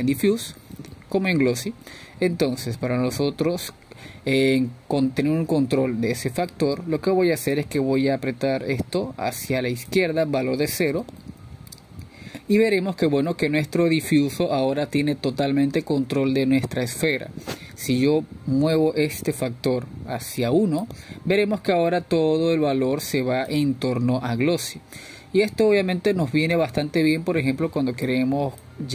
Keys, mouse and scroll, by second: 11.0-15.9 drag, 15.9-19.8 scroll down 2, 22.1-28.9 drag.